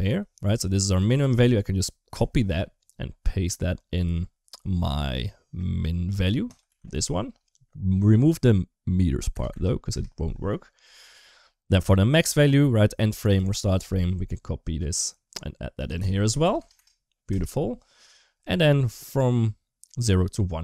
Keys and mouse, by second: 0.8-2.0 ctrl+drag, 6.3-9.7 ctrl+drag, 9.3 BackSpace, 11.9 click, 13.0 ctrl+click, 15.7-17.1 ctrl+drag, 16.6 BackSpace.